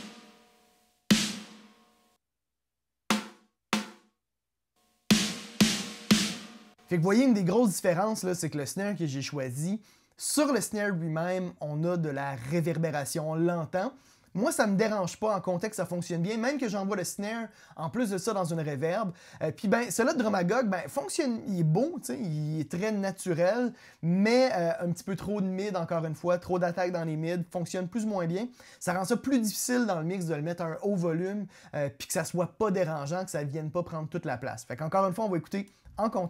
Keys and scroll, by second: 6.3 space.